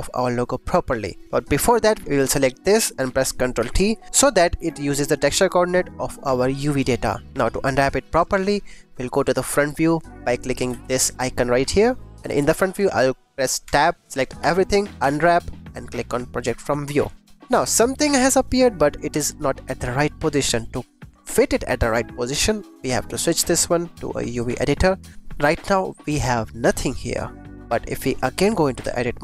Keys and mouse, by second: 0.9 click, 2.0 click, 2.2 click, 3.5 ctrl+t, 4.3 g, 5.6 click, 8.0 click, 11.7 click, 13.8 Tab, 14.5 a, 15.0 u, 17.3 Tab, 17.9 click, 23.0-24.5 drag, 28.1 click, 28.9 Tab.